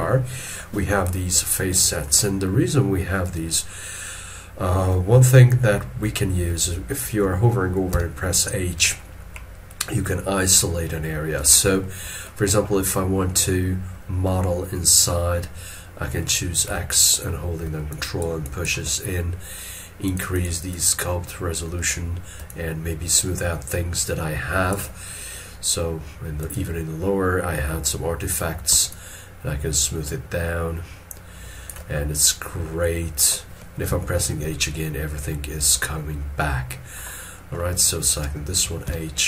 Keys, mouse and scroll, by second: 1.8 shift+middle click, 7.9 h, 9.3 middle click, 11.8 shift+middle click, 16.7 x, 17.9 ctrl+click, 18.4 ctrl+click, 20.3 double click, 22.5 shift+click, 28.9 shift+click, 33.0 middle click, 33.8 h, 34.6 middle click, 38.8 h.